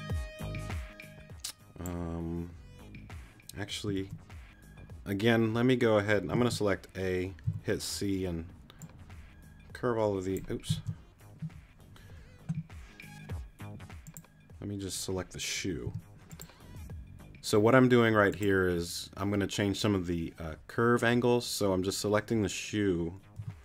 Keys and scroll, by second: 4.0 super+z, 6.6 super+a, 7.9 c, 11.0 super+z, 15.8 t, 23.4 g.